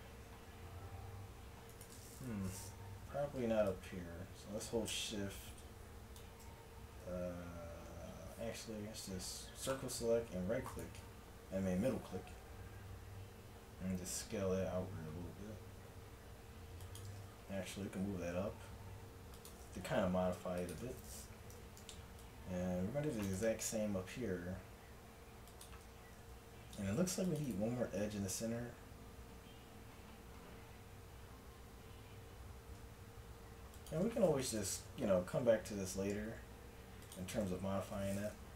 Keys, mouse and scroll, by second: 2.9 middle click, 3.1 z, 3.7-5.7 drag, 8.9 c, 11.1 middle click, 11.3 z, 13.1 s, 17.5 g, 19.9 s, 21.5 a, 21.5 z, 21.8 c, 23.8 s, 26.0 a, 26.3 z, 27.0 ctrl+r, 28.0 s, 34.7-37.5 drag, 35.4 s, 37.5 a.